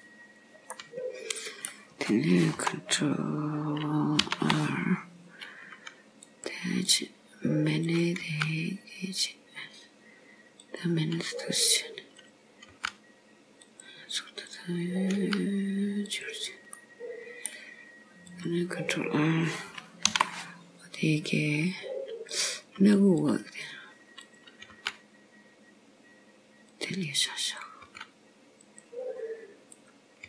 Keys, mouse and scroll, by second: 0.3 scroll down 2, 1.0 middle click, 4.3 ctrl+r, 7.2 click, 7.9 click, 8.3 g, 11.3 scroll up 2, 12.3 click, 12.8 g, 14.5 click, 15.2 g, 16.8 middle click, 18.4 click, 20.2 ctrl+r, 24.3 click, 24.5 click, 24.8 g, 27.6 click, 27.9 g, 29.9 click.